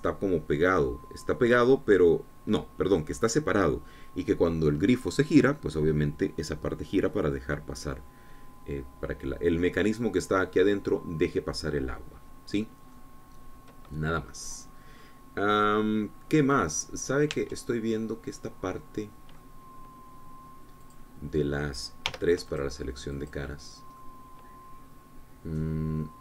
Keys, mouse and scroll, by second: 13.8 scroll down 2, 14.2-16.4 drag, 17.6-18.6 scroll up 2, 18.6 Tab, 19.2 click, 19.3-20.8 middle drag, 22.2 click, 23.4 3, 23.7-25.2 drag, 25.2-26.2 middle drag.